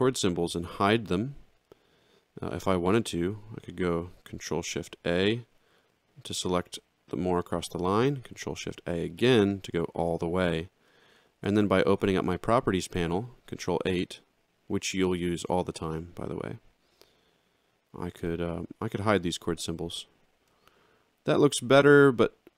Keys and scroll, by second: 5.6 ctrl+shift+a, 9.0 ctrl+shift+a, 11.3 ctrl+8.